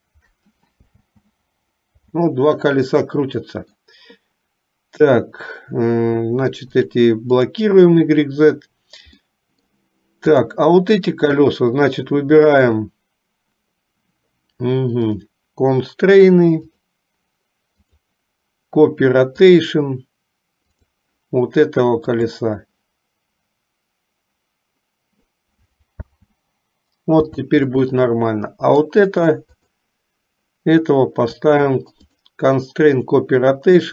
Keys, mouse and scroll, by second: 1.0 space, 2.2 space, 2.8-4.0 middle drag, 9.4 middle click, 10.5 click, 15.1 click, 18.0-19.8 drag, 20.8 click, 26.1 space, 27.5 space, 27.9-29.2 middle drag, 29.8 click, 32.1-33.3 drag.